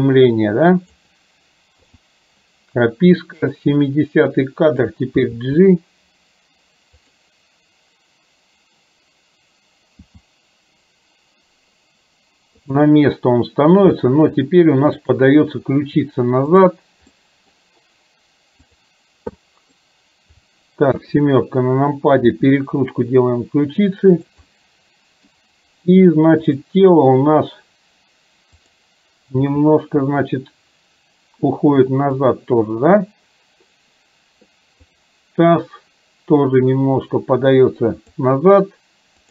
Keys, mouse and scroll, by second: 3.6 click, 5.2 g, 10.1 r, 14.1 middle click, 15.2 click, 16.6 click, 17.2-17.6 middle drag, 19.6 middle drag, 21.0 KP_7, 22.2 r, 24.5 middle click, 26.6 click, 28.6 click, 29.6 r, 36.9-38.2 drag.